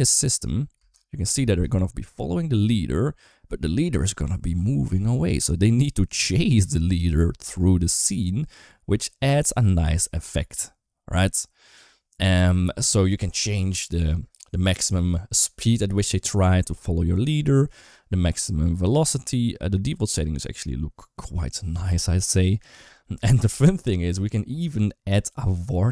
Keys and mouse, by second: 0.6 space, 21.5 space.